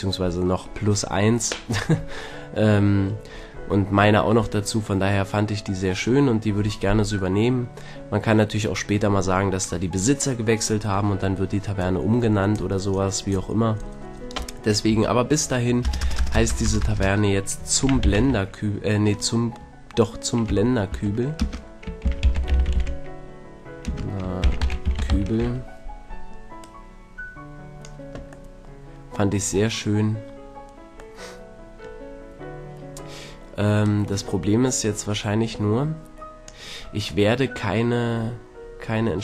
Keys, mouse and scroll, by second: 7.4-8.4 middle drag, 14.9 Tab, 15.9-16.8 typing, 17.9 BackSpace, 17.9 shift+z, 18.1 u, 18.2 m, 20.5 Tab, 20.9 Tab, 21.4-22.7 typing, 23.9-25.2 typing, 25.4 Tab, 26.6-28.5 drag, 28.5-33.9 middle drag, 33.9-35.8 drag, 37.3-39.2 middle drag.